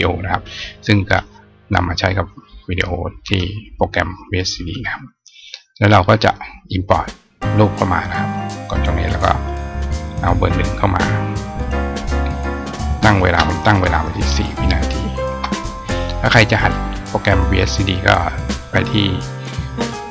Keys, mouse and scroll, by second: 0.9 click, 3.1 click, 8.2 click, 9.8 click, 12.9 click, 17.6 click.